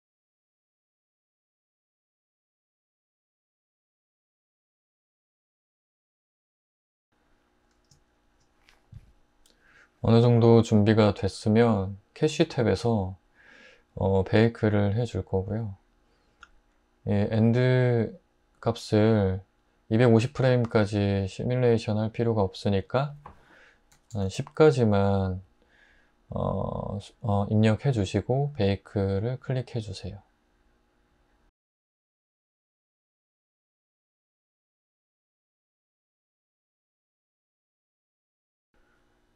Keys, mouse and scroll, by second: 2.0 ⟲, 6.0 Tab, 6.2 i, 6.3 s, 6.4 Tab, 6.6 Tab, 6.7 l, 6.8 r, 23.9-24.2 typing, 31.4 Tab.